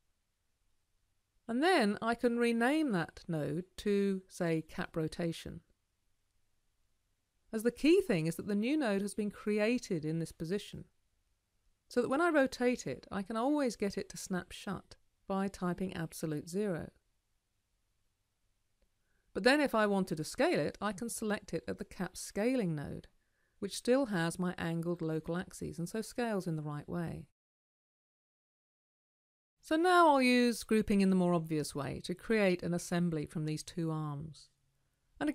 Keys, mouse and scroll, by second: 8.1-9.0 scroll down 2, 9.0-9.5 scroll down 1, 10.4-11.3 scroll down 2, 11.3-11.7 scroll down 1, 19.8-22.7 right drag.